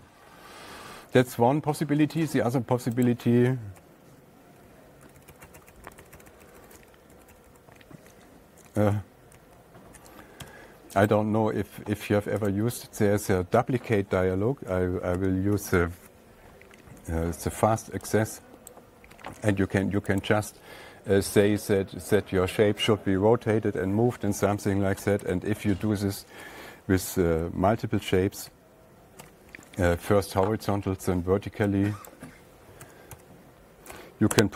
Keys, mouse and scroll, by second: 2.6 alt+Tab, 3.5 click, 4.2-5.1 ctrl+z, 4.5 alt+Tab, 5.5 ctrl+z, 5.6 ctrl+z, 5.8 ctrl+z, 5.9 ctrl+z, 6.1 ctrl+z, 6.2 ctrl+z, 6.3 ctrl+z, 6.5 ctrl+z, 6.6 ctrl+z, 6.8 ctrl+z, 6.9 ctrl+z, 7.0 ctrl+z, 7.2 ctrl+z, 7.6 ctrl+z, 7.8 ctrl+z, 8.0 ctrl+z, 9.2 ctrl+y, 9.8 ctrl+y, 10.9 Tab, 11.6 click, 13.0 click, 15.6 F3, 19.1 click, 19.9 F3, 20.7 click, 25.7 ctrl+a, 27.7 F8, 29.6 F3, 32.6 click, 33.0-34.5 typing.